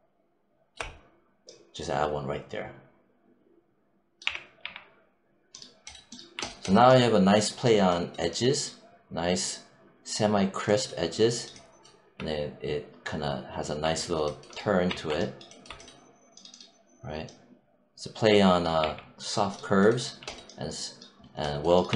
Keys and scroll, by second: 4.1 w, 4.5 3, 14.7 1, 18.6 3, 21.7 1.